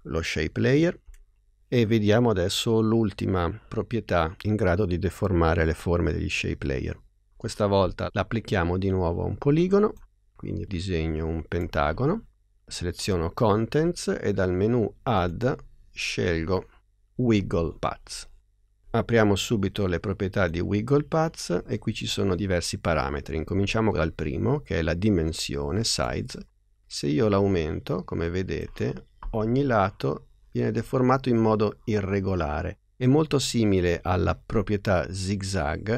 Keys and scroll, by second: 1.0 BackSpace.